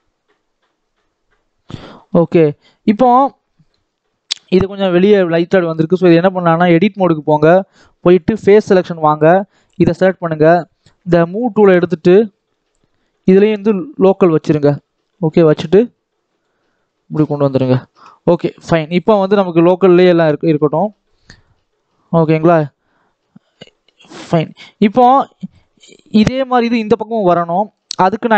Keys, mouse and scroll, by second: 0.2 scroll up 1, 0.4 scroll down 1, 0.8-2.5 middle drag, 2.5-3.2 scroll up 2, 3.2 scroll down 2, 3.4 middle click, 3.8 scroll up 2, 4.0 shift+middle click, 4.3-4.7 scroll up 1, 4.7-5.7 middle drag, 5.7 click, 6.6-9.3 drag, 11.1 click, 11.5 scroll down 3, 11.6 middle click, 12.0 scroll up 1, 12.2 middle click, 13.0-14.2 drag, 14.2-15.5 scroll down 2, 15.5-16.5 drag, 16.5 scroll down 3, 16.8 middle click, 17.2-17.8 scroll up 1, 17.8 Tab, 18.1 middle click, 18.8 click, 19.1-20.6 middle drag, 20.6 click, 21.2 click, 21.8 click, 23.1-23.7 scroll down 1, 23.7-24.3 scroll down 1, 24.3 click, 24.6-25.1 scroll up 2, 25.1 scroll down 2, 25.3-27.0 middle drag, 27.0 ctrl+s, 27.6 scroll down 1, 27.8 middle click, 28.1-28.3 scroll up 2.